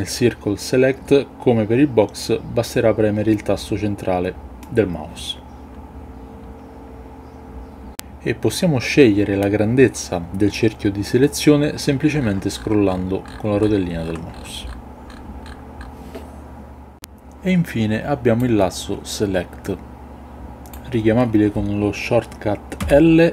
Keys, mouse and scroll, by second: 4.5-7.9 middle drag, 18.3-20.7 drag, 22.7 l.